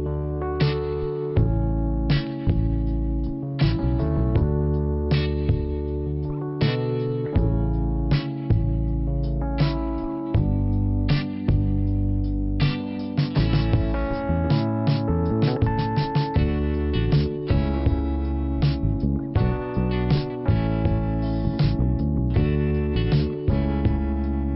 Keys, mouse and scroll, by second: 1.9 click, 3.0 click, 4.0 click, 5.2 click, 7.1 click, 8.4 click, 10.9 click, 12.8 ,, 13.4 click, 13.8 click, 14.4 double click, 16.1 middle click, 18.4 click, 20.4 click, 21.8 click, 22.6 click, 22.7 click.